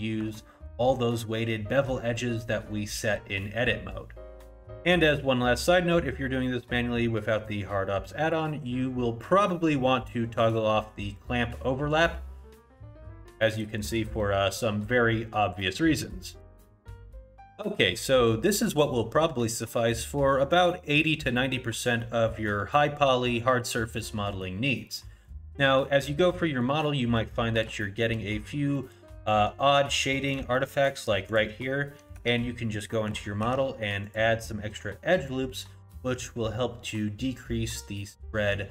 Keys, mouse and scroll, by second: 0.4 shift+middle click, 2.1 middle click, 12.4 click, 22.0 middle click, 24.0 middle click, 25.0 middle click, 25.6 middle click, 26.8 middle click, 27.4 middle click, 27.8 shift+middle click, 28.2-28.8 scroll up 1, 28.8 middle click, 29.8-30.1 scroll up 1, 30.1 middle click, 30.6 shift+middle click, 31.3 click, 32.3 Tab, 33.4 ctrl+r.